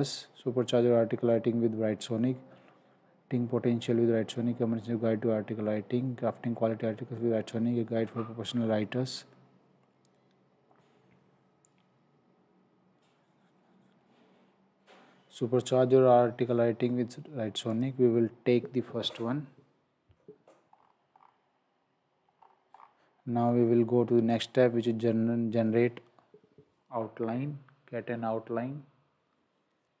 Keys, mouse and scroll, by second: 17.7 click, 20.7-22.0 scroll down 1, 22.3-22.7 scroll up 1, 22.7-23.7 scroll down 1, 24.3 click.